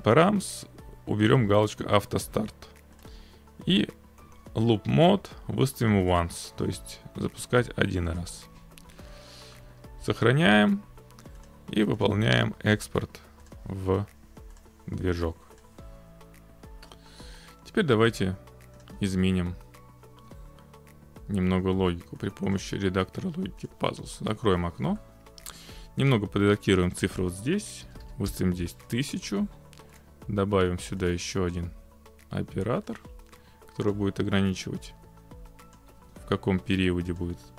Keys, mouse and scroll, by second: 2.2 click, 3.0 click, 6.1 click, 8.2 click, 8.5-8.9 scroll, 9.5 scroll, 10.0 ctrl+s, 11.5 click, 12.1 click, 13.5 click, 14.7 click, 15.7 click, 16.8 click, 18.9 click, 22.6 click, 24.3 click, 25.0 middle click, 27.0 click, 27.1-27.9 typing, 29.0 click, 30.0 click, 31.5 click, 33.9 click, 35.8 click, 37.2 click.